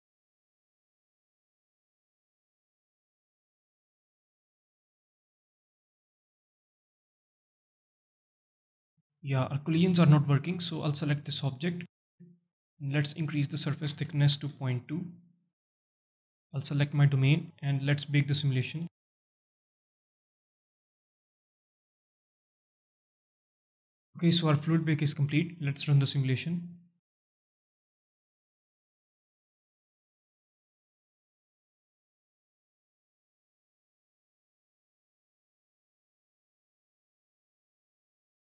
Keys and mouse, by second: 9.3 space, 9.9 shift+Left, 11.7 click, 13.3-15.3 drag, 17.9 click, 25.5 space, 33.4 space, 33.7 alt+drag, 34.2 shift+drag, 34.5 space, 37.9 space, 38.1 alt+click.